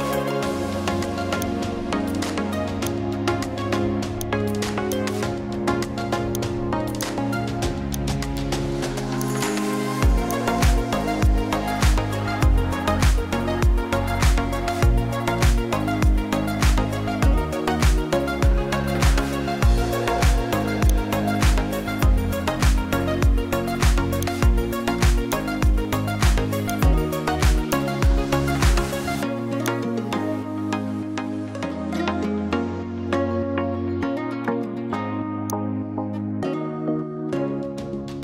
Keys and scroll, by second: 0.2 ctrl+shift+t, 22.5 ctrl+alt+shift+e.